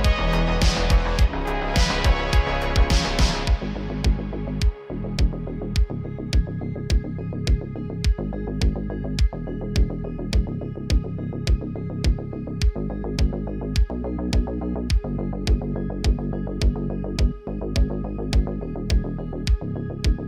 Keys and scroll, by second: 4.9 g, 7.4 s, 14.3-15.6 typing, 16.8 r, 17.0 r, 18.1 s, 18.7 s.